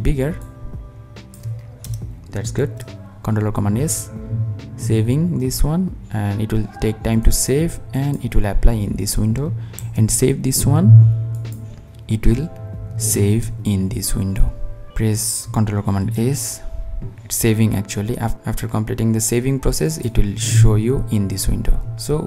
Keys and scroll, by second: 2.4 super+s, 9.9 super+s, 16.0 super+s.